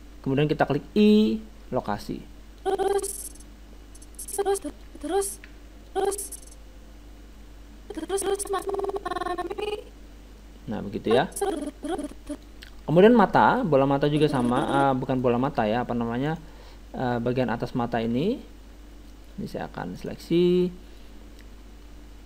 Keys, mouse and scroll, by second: 1.0 i, 2.6-4.4 drag, 4.9 alt+a, 5.9 alt+a, 5.9-7.6 drag, 13.0-17.0 middle drag, 14.1-16.3 drag, 16.3-18.3 right drag, 18.3-19.9 middle drag, 20.3-22.2 right drag.